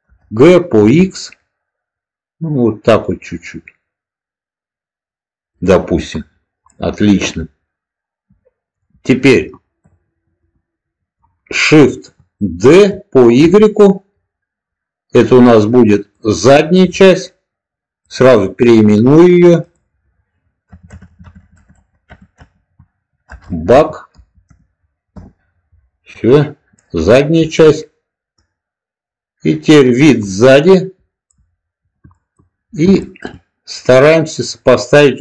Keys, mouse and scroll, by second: 0.7 x, 5.4 click, 6.8-8.7 middle drag, 10.3 click, 12.6 shift+d, 13.3 y, 15.8 click, 18.0 click, 20.8-25.8 drag, 20.8-22.7 BackSpace, 26.7-27.4 middle drag, 28.3 click, 30.1-31.2 middle drag, 32.0 shift+middle click, 33.0 shift+middle click, 34.4-35.2 drag.